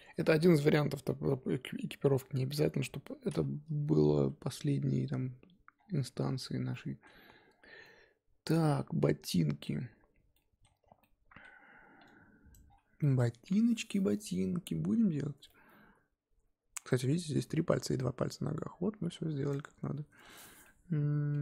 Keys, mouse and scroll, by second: 0.5 click.